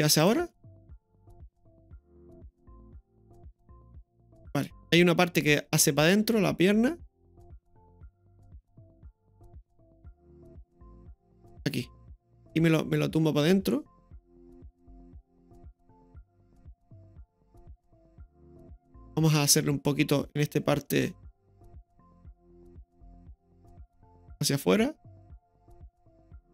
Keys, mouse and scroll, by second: 0.2 click, 0.3 i, 4.9-21.1 drag, 21.1-21.6 scroll down 1, 21.6-22.5 middle drag, 23.0 right click, 23.4-24.0 middle drag, 24.6-25.9 drag.